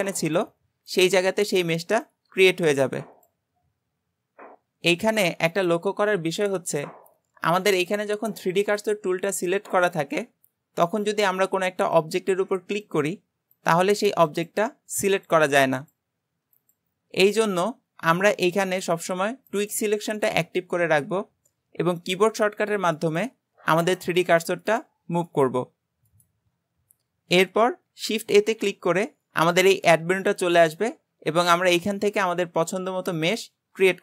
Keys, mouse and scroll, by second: 11.1 click, 12.0 click, 12.8 click, 13.6 click, 14.3 click, 15.2 click, 15.8 click, 16.6 click, 19.5-22.2 drag, 22.2 shift+right click, 23.0 shift+right click, 23.8 shift+right click, 24.7 shift+right click, 25.3 shift+right click, 26.1 shift+right click, 28.4 shift+a.